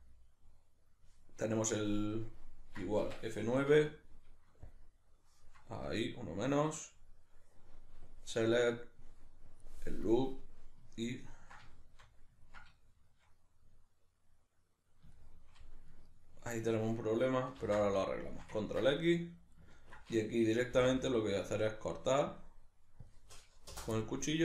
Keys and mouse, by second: 2.3-5.9 drag, 3.1 Escape, 5.9-8.1 middle drag, 8.1-10.3 drag, 10.3-24.4 middle drag, 17.6 ctrl+x, 20.7 k.